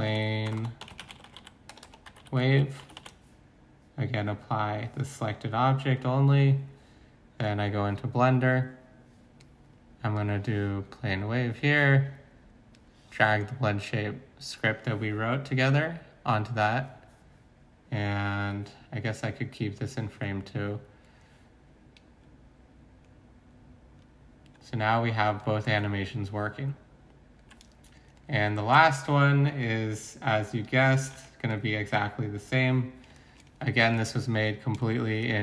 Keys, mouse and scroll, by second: 0.0-3.0 typing, 6.9-8.4 typing, 28.7 alt+Tab, 31.1 x.